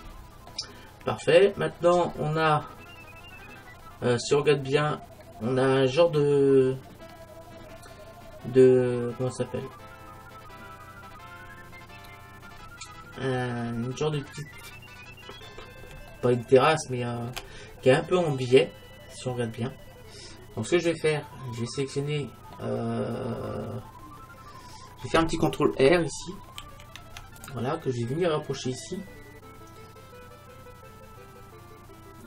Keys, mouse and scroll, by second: 1.4-1.8 scroll up 1, 1.8-4.3 middle drag, 4.3-5.5 scroll up 1, 5.5-14.6 middle drag, 15.1-16.2 middle drag, 17.8-20.4 middle drag, 21.2 middle click, 23.2-26.6 middle drag, 26.6 ctrl+r.